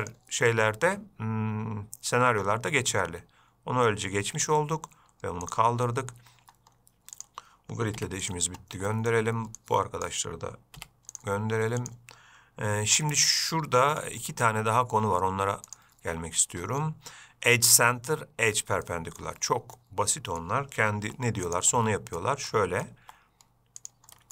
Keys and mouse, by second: 0.4-6.1 drag, 8.2 x, 9.2 middle click, 9.9-10.4 drag, 11.0 x, 13.3-14.3 middle drag, 14.5 shift+middle drag, 16.0-19.6 drag, 20.0-20.7 middle drag, 21.3 g, 22.0-22.5 middle drag, 22.8-23.1 middle drag, 23.3 g.